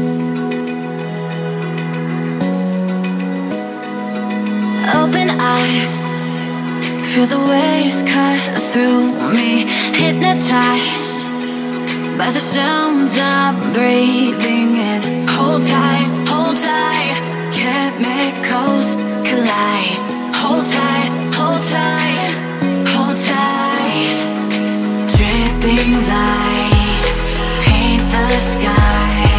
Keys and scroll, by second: 3.6 space, 4.1 space, 4.2 space, 4.3 space, 16.0 Tab, 23.8 Tab, 24.4 space, 24.9 super+space, 25.0 super+space, 25.0 super+space, 25.1 super+space, 25.2-25.5 super+space, 27.8 o.